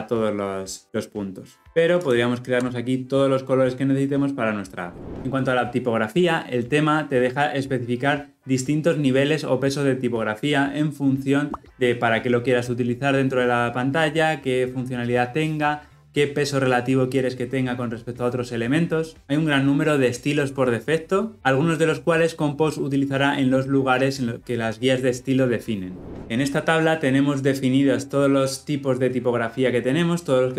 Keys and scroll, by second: 2.0 ctrl+b.